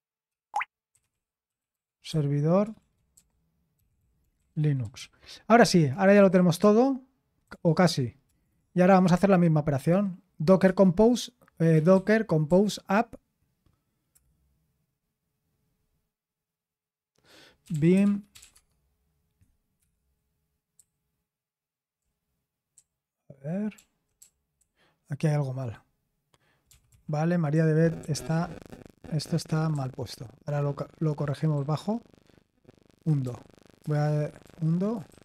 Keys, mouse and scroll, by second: 0.0-11.9 typing, 14.1 typing, 17.5-21.9 typing, 23.7-25.6 typing, 26.7-33.2 typing, 34.4-35.2 typing.